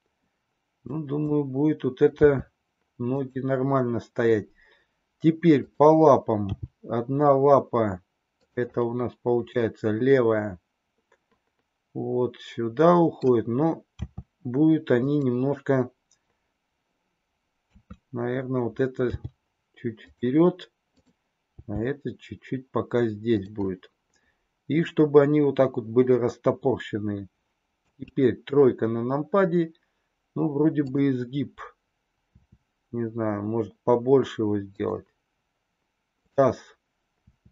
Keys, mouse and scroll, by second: 0.7 click, 2.0 r, 7.0 g, 8.7-13.1 middle drag, 13.9 r, 17.6 KP_3, 19.0 g, 21.6 g, 23.7-25.0 middle drag, 27.7 KP_3, 32.2 r, 37.2 r.